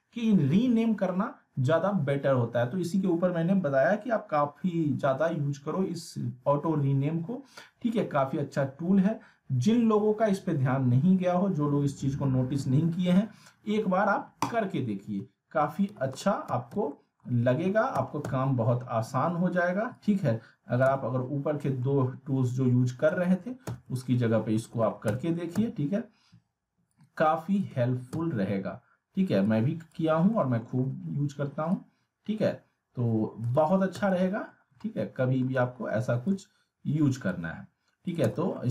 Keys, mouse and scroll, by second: 14.4 click, 15.9 w, 16.1 w, 16.9 alt+middle click, 17.2 alt+scroll up 2, 17.5 alt+w, 17.9 z, 18.5-19.2 scroll down 1, 19.9-20.9 click, 20.9 z, 21.2-21.6 scroll down 1, 21.6 middle click, 22.5-23.1 click, 23.2 alt+w, 23.6 z, 24.0-24.6 alt+middle click, 24.6 alt+w, 25.1 z, 26.9-27.8 click, 27.7 alt+w, 28.1 z, 29.5-30.0 click, 30.3 middle click, 30.8-31.3 scroll up 1, 31.7-33.6 drag, 33.5 alt+w, 33.9 z, 34.2 alt+middle click, 34.6 scroll down 1, 34.8-35.4 alt+middle drag, 36.2-37.5 shift+drag, 38.1 click, 38.2 z, 38.6-38.7 alt+middle click.